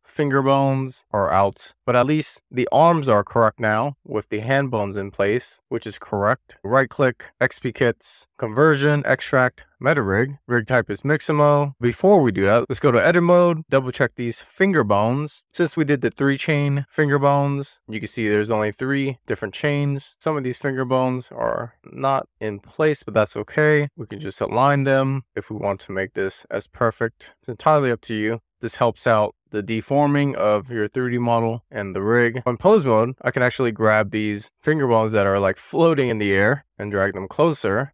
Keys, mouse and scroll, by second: 6.6-11.2 right drag, 11.6 click, 13.8-16.4 middle drag, 16.9 click, 18.0-18.8 scroll up 2, 19.4 middle click, 20.7 click, 21.2 middle click, 22.1 click, 23.6 click, 23.7 middle click, 24.1 click, 24.8 click, 25.2 middle click, 25.3 super+z, 25.4 click, 25.7 click, 26.1 middle click, 26.2 click, 27.1 scroll up 2, 27.2 middle click, 27.7-28.1 scroll down 1, 28.1 shift+middle click, 28.6 click, 28.8-29.3 scroll down 4, 29.1 KP_Decimal, 29.4 shift+click, 29.8 x, 29.9 shift+super+z, 30.1 click, 30.6 click, 30.9 middle click, 31.0 shift+click, 31.6 click, 31.9 scroll down 5, 32.0 shift+middle click, 32.3 click, 32.6 shift+middle click, 33.1 click, 33.7 middle click, 33.9 click, 34.0 middle click, 34.4 click, 34.6 middle click, 34.8 scroll up 3, 35.3 click, 35.4 middle click, 35.7 scroll down 2, 36.1 click, 36.4 middle click, 36.6-37.0 scroll down 1, 37.0 click, 37.4 middle click, 37.5 click.